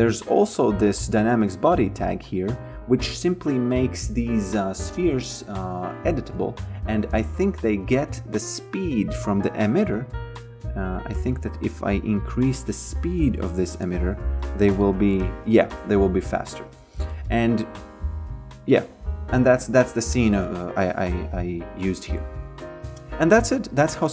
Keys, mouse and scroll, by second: 0.2 click, 7.0 click, 8.5 b, 8.9 f, 10.3 click, 10.9 f, 11.2 click, 11.6 f, 13.9 shift+click, 14.6 f, 16.2 ctrl+z, 17.1 f, 21.5 f, 22.0 alt+click, 22.6 alt+middle click, 23.5 alt+click, 23.9 f.